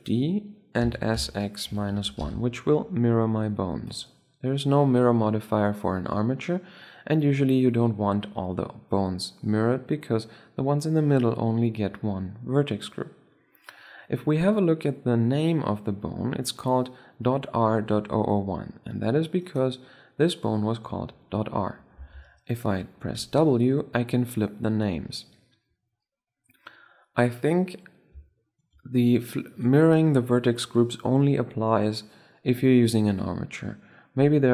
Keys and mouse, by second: 0.6 s, 6.9-8.6 middle drag, 12.5-16.4 middle drag, 19.1-20.8 right drag, 20.8 drag, 21.8 ctrl+z, 22.9 w, 27.0-30.0 middle drag.